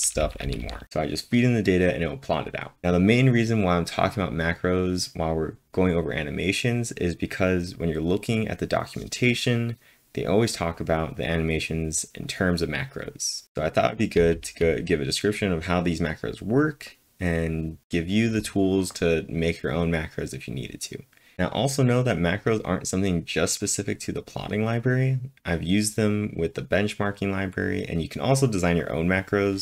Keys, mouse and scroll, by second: 0.0-1.3 typing, 14.1 typing.